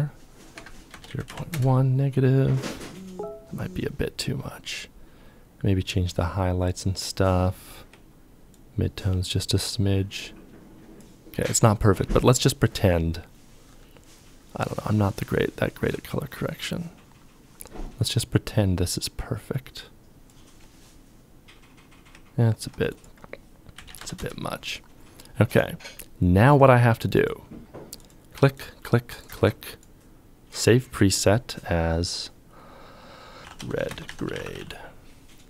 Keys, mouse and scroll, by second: 0.0 KP_0, 0.2 KP_Decimal, 0.4 KP_1, 0.6 Return, 7.7 Return, 7.7 ctrl+click, 15.5 ctrl+click, 22.9-23.2 typing, 23.3 Return, 28.3 ctrl+click, 33.2-34.7 typing.